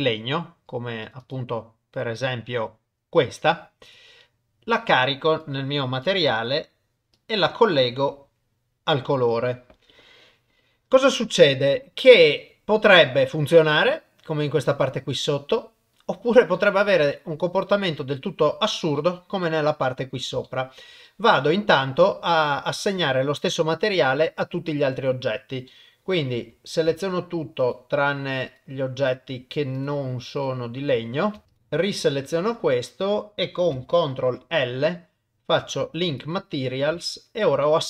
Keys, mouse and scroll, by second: 6.0 click, 6.3 click, 7.1 click, 13.0 shift+middle click, 13.5 middle click, 14.6-15.9 middle drag, 16.6 middle click, 17.1 shift+click, 17.2 shift+middle click, 19.4 middle click, 20.4 shift+middle click, 21.0 middle click, 25.7 middle click, 26.3 a, 27.0 click, 27.6 click, 30.4 shift+click, 31.5 shift+click, 34.3 ctrl+l, 37.1 shift+middle click, 37.6-37.8 middle drag.